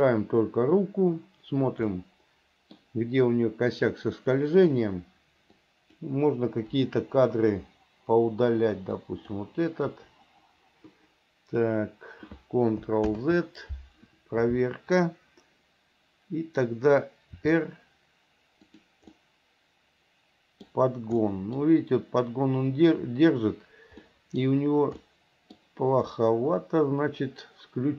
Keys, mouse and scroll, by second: 0.0 click, 2.1 middle click, 4.1 click, 5.9 click, 7.0 Delete, 9.3 click, 10.1 Delete, 13.3 ctrl+z, 17.6 r, 19.3-20.9 middle drag, 21.5 middle click, 24.2 middle click, 25.2 middle click, 26.3-27.9 middle drag.